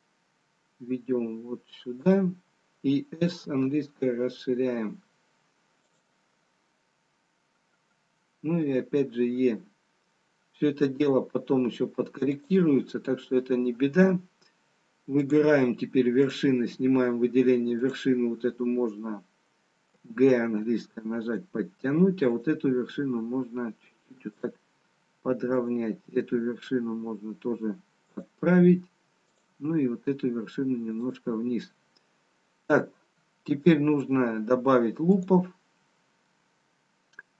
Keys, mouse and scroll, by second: 3.2 s, 8.8 e, 15.2 click, 16.4 click, 18.3 click, 20.0 g, 25.5 click, 26.1 g, 29.3 click, 29.7 g, 35.3 click.